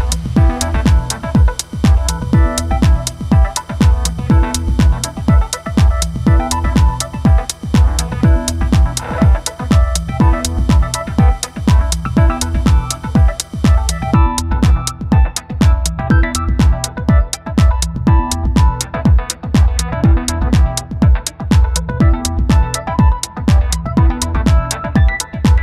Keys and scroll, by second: 2.5 space, 5.2 ctrl+0, 19.8 Tab.